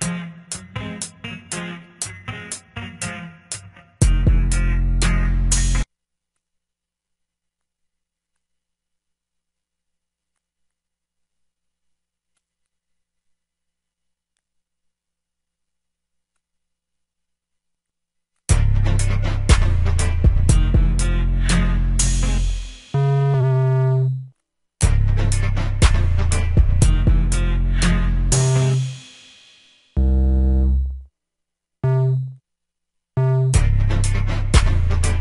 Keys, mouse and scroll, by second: 5.8 F1, 8.7 drag, 8.9 F1, 8.9 drag.